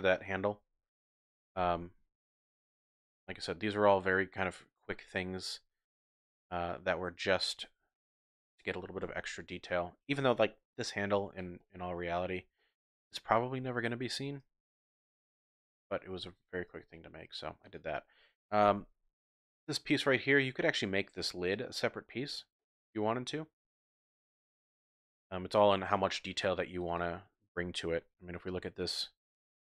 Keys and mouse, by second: 0.5-0.9 ctrl+z, 1.1 ctrl+z, 1.2 ctrl+z, 1.4 ctrl+z, 1.6 ctrl+z, 1.8 ctrl+z, 2.0 ctrl+z, 2.2 ctrl+z, 2.4 ctrl+z, 2.9 ctrl+z, 3.4 Tab, 5.0-6.6 drag, 7.9 shift+drag, 9.0 KP_Divide, 11.6-12.2 drag, 12.5 shift+drag, 12.8 shift+middle drag, 12.9 shift+click, 13.7 middle click, 13.9 shift+click, 14.0 shift+middle drag, 14.1 shift+click, 14.6-15.4 drag, 15.7 shift+drag, 16.9 shift+drag, 17.7 click, 18.6 KP_Decimal, 19.6-19.9 drag, 19.9 middle click, 20.0-20.3 drag, 20.3 typing, 22.6-24.1 drag, 24.1-25.4 middle drag.